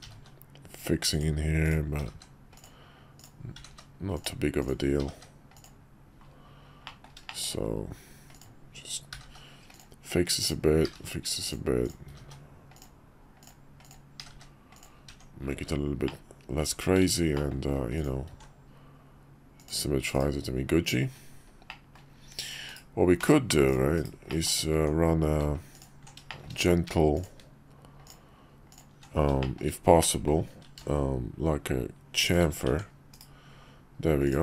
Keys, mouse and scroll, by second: 0.0 g, 1.6 click, 2.0 g, 3.2 click, 3.5 g, 4.6 click, 5.0 g, 6.9 middle click, 7.3 shift+middle click, 8.3 click, 9.1 g, 10.4 click, 10.9 g, 11.8 click, 12.1 g, 13.4 click, 13.8 click, 14.2 g, 15.1 Tab, 16.0 middle click, 17.3 middle click, 18.3 alt+x, 20.1 /, 21.7 click, 22.4 click, 22.6 /, 23.1 /, 23.9 /, 24.3 click, 24.7 Tab, 26.3 shift+click, 28.0 alt+shift+click, 29.4 shift+click, 30.0-32.4 drag, 30.6 ctrl+b, 32.7 Tab, 33.1 /.